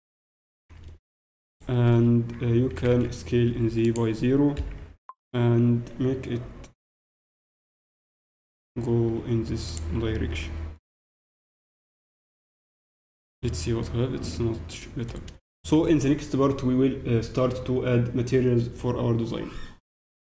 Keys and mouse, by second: 1.5-2.6 right drag, 2.6 click, 3.2 s, 4.7 z, 6.3-7.5 drag, 6.3 r, 9.8 z, 10.1 Tab, 11.2 alt+h, 12.2 KP_Divide, 15.4-17.9 middle drag.